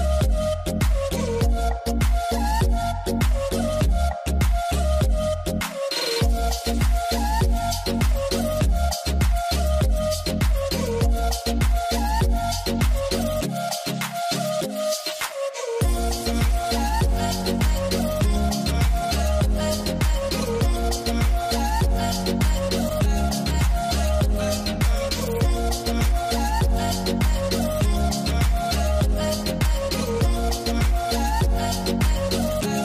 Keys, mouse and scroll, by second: 3.1-4.7 scroll down 1, 4.7 scroll down 1, 4.7 right click, 7.2 double click, 10.8 double click, 12.0-12.3 scroll up 1, 12.3 m, 26.5 middle click, 26.8-27.2 scroll down 1, 27.9 middle click, 28.2-29.1 scroll down 1, 29.2 right click.